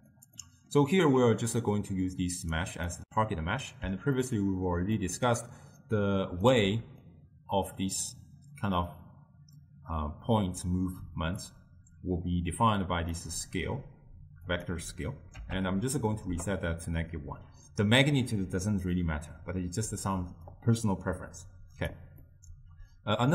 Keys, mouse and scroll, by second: 0.5-1.6 middle drag, 1.6 drag, 3.0-5.9 middle drag, 5.9 click, 7.1 click, 11.5-17.6 drag, 20.6-22.3 drag, 22.3-23.3 middle drag.